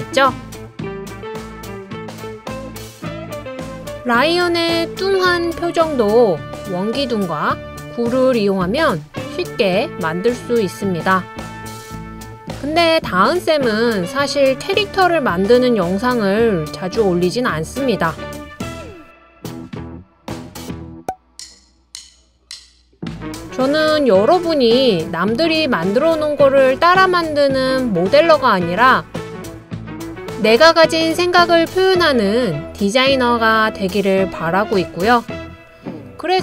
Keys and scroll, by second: 18.4 super+c, 18.5 super+v, 21.6 super+c, 21.7 super+v, 23.7 super+c, 23.8 super+v, 25.5 super+c, 30.3 super+c, 30.4 super+v, 36.1 i.